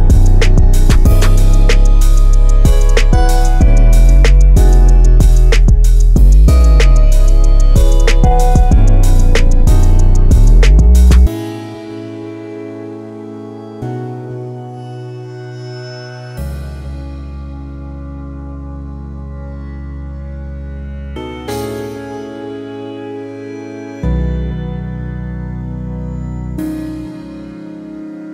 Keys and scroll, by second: 15.8-17.1 typing, 18.8-19.8 typing, 20.8-21.7 typing.